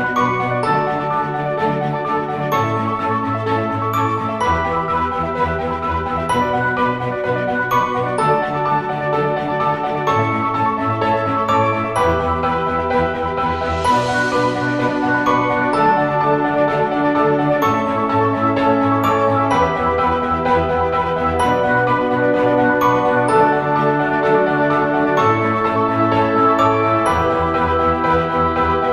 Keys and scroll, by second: 0.0-17.9 typing, 10.6 ctrl+z, 20.5-28.9 typing.